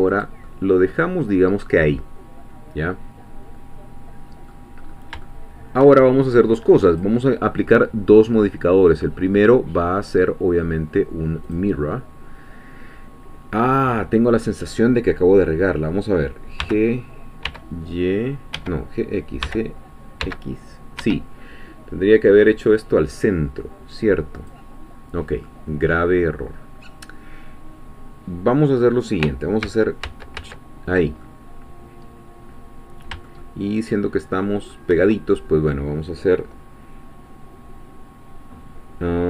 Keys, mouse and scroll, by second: 0.1 click, 0.4-4.8 middle drag, 4.8-5.2 scroll up 1, 5.2 shift+middle click, 6.9 click, 11.5 click, 16.6 g, 17.4 y, 18.6 Escape, 19.4 g, 20.2 x, 21.0 Escape, 24.4 click, 25.1 scroll down 1, 25.4-29.2 middle drag, 29.6 ctrl+z, 31.2-34.9 ctrl+middle drag.